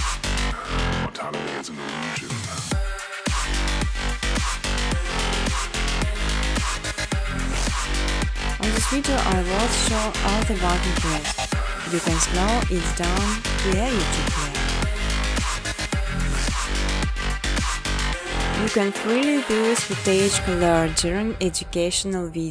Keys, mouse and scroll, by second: 0.4 click, 1.2 click, 1.7 click, 2.7-3.8 typing, 4.3 right click, 5.4 click, 6.1 click, 6.4 click, 7.0 click, 7.6 click, 8.1 click, 9.1 click, 9.5 click, 10.5 click, 12.0 click, 13.0 click, 14.4 click, 15.3-16.5 typing, 17.0 Tab, 17.4 Tab, 17.8 Tab, 18.0 Tab, 18.3-20.4 typing, 21.6-22.5 typing, 22.3 alt+click.